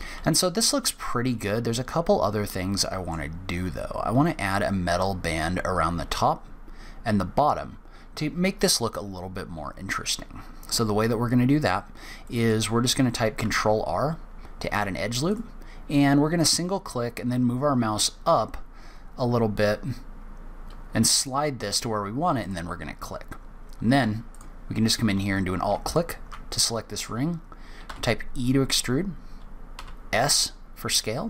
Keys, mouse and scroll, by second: 12.2 middle click, 12.7-13.2 scroll up 2, 13.4 ctrl+r, 24.3 click, 25.8 alt+click, 26.5 middle click, 27.8 e.